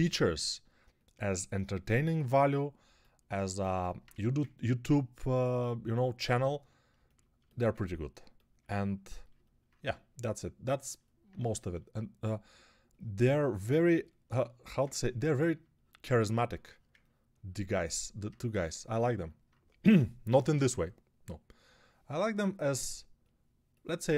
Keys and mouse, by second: 19.7 g, 20.1 ], 20.3 ].